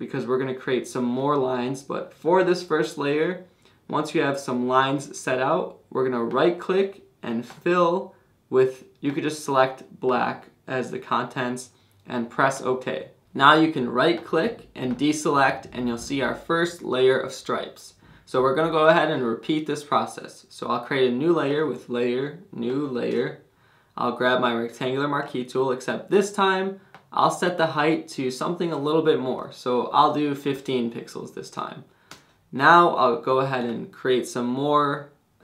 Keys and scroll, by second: 23.1 Return, 30.1-31.0 typing, 32.1 Return.